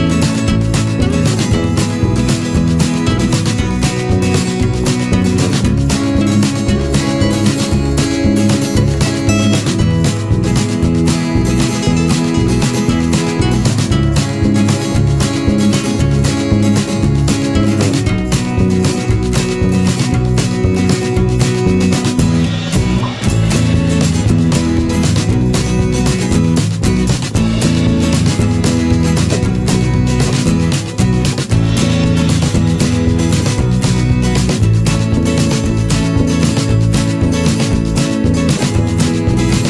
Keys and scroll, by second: 1.4 ctrl+z, 10.5 ctrl+h, 21.9 ctrl+-, 22.8 ctrl+0, 29.5 ctrl+-.